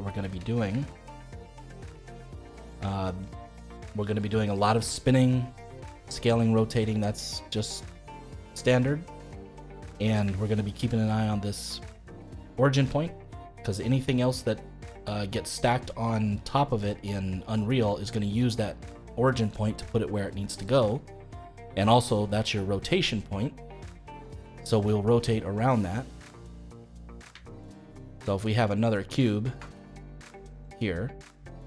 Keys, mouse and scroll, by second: 0.5-0.8 scroll up 2, 0.8-2.5 shift+middle drag, 2.5-2.9 scroll down 2, 2.9-9.8 shift+middle drag, 9.8-10.2 scroll up 3, 10.2-16.3 shift+middle drag, 23.3-26.9 middle drag, 26.9-27.4 scroll down 2, 27.4-29.5 shift+middle drag, 29.5 shift+d.